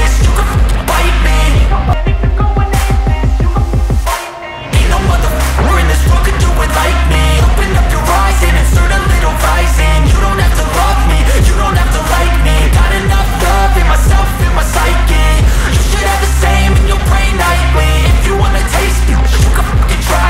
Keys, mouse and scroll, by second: 4.2 right click, 6.8 click, 8.5 right click, 9.5 scroll up 1, 11.5 shift+click, 12.5 shift+right click, 13.9 click, 14.4 scroll down 1, 15.0 click, 15.3 scroll down 1, 16.1 click, 16.4 scroll down 1.